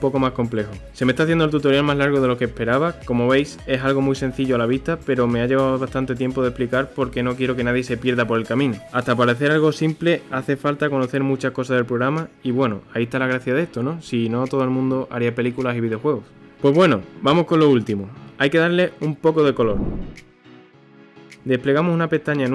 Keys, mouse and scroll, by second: 0.2-4.5 shift+middle drag, 5.1 ctrl+s, 7.1-7.9 scroll up 1, 7.9-10.9 middle drag, 11.7-12.2 scroll up 1, 12.2-14.5 middle drag, 14.5-15.3 scroll down 1, 15.3-19.5 shift+middle drag.